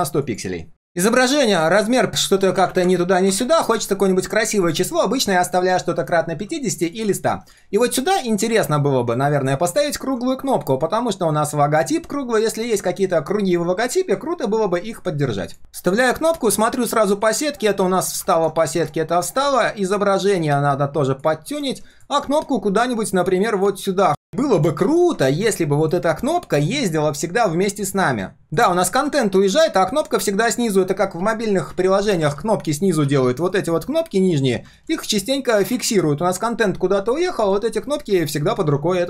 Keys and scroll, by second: 15.6 ctrl+v, 16.0 ctrl+shift+4, 24.8 ctrl+z, 35.7 ctrl+d.